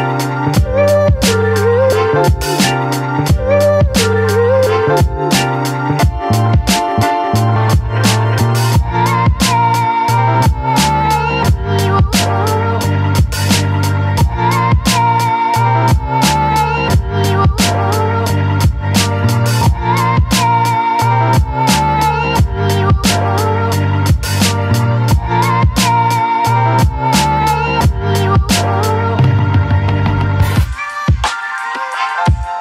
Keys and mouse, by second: 1.0 click, 2.1 [, 2.4 [, 2.6-3.6 drag, 2.6 [, 4.5 click, 5.7 a, 6.5 middle click, 7.6 shift+middle click, 13.1 click, 14.0 ctrl+x, 15.0 ctrl+z, 15.1 click, 15.9 ctrl+z, 16.0 ctrl+z, 17.6 middle click, 18.5 middle click, 19.7 middle click, 20.1-21.5 middle drag, 21.9 shift+middle click, 22.4 middle click, 23.0 shift+middle click, 23.5 ctrl+i, 24.1 b, 24.8 b, 26.4 click, 26.7 click, 28.3-28.8 ], 30.3 a.